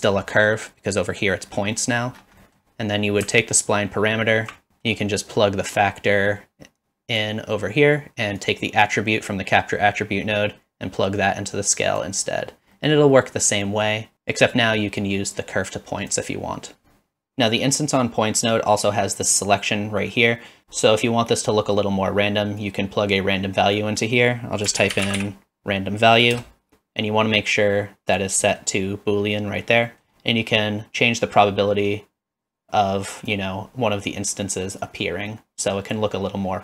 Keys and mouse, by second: 0.4 middle click, 1.8 middle click, 2.5 middle click, 3.4-4.5 alt+drag, 4.8 middle click, 5.7-7.2 drag, 8.4-12.0 drag, 12.8 middle drag, 13.7 middle click, 14.1 click, 15.0-16.1 drag, 18.8-20.6 drag, 22.6-26.4 drag, 28.1 click, 30.5-33.3 drag, 34.9-36.0 drag.